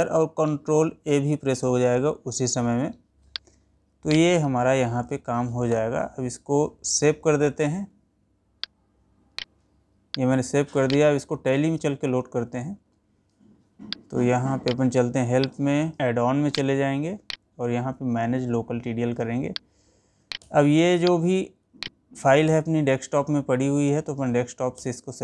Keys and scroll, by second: 22.1 Up, 24.8 Down.